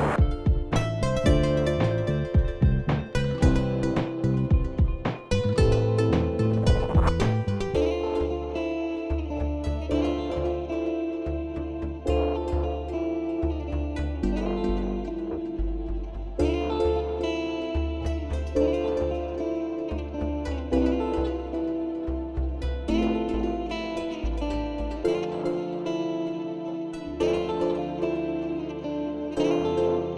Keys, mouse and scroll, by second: 1.8 click, 3.6 click, 3.8 click, 4.7 m, 5.7 typing, 7.1 click, 9.2 click, 10.9 click, 12.4 click, 14.8 click, 15.5 ctrl+z, 17.7 click, 18.1 click, 18.2-19.7 scroll, 19.7 click, 22.9 right click, 24.7 click, 26.1 click, 26.8 alt+scroll, 27.7 alt+scroll up 1, 28.0 click, 28.0 alt+scroll, 28.7-30.1 typing.